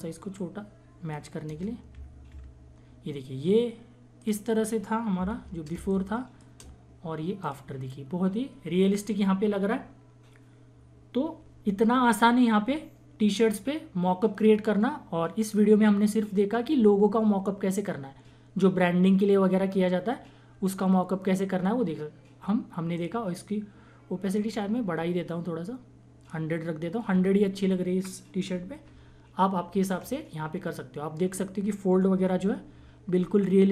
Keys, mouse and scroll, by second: 1.4 Return, 1.9 Down, 4.1 click, 5.3 ctrl+=, 5.7 space, 5.9 click, 6.2 space, 7.4 click, 9.8 typing, 22.9-28.9 drag, 24.6 typing, 28.9 ctrl+-, 32.3 ctrl+=, 32.4 typing.